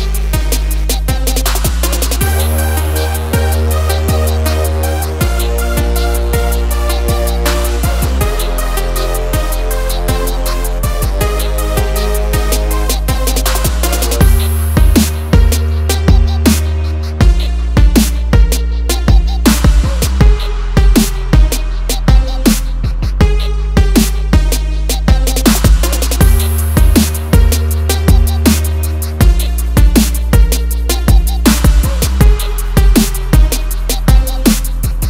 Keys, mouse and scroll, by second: 1.0 click, 2.6 click, 2.9 double click, 3.7 click, 4.5 ctrl+o, 5.6 scroll down 1, 6.5 click, 7.4 click, 9.2 click, 9.5 double click, 10.4 click, 11.3 click, 12.2 double click, 12.9 ctrl+click, 13.8 scroll up 1, 14.2 scroll down 1, 16.0 click, 17.0 click, 19.0 h, 20.0 space, 20.6 shift+t, 20.9 e, 23.5 u, 26.5 click, 26.7 double click, 27.3 click, 28.3 click, 28.9 click, 29.9 shift+click, 31.8 c, 33.0 click, 34.4 click.